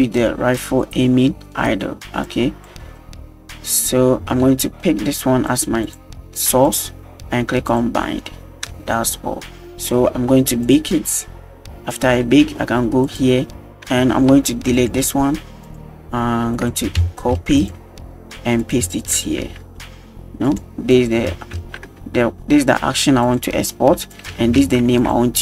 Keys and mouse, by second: 2.3 drag, 3.0 middle drag, 5.5 click, 5.8 click, 7.7 click, 8.7 space, 9.7 space, 10.6 click, 13.1 click, 14.1 g, 14.8 right click, 14.9 x, 16.5-17.6 drag, 18.6-20.6 ctrl+drag, 20.9-23.4 drag, 24.1-25.0 drag.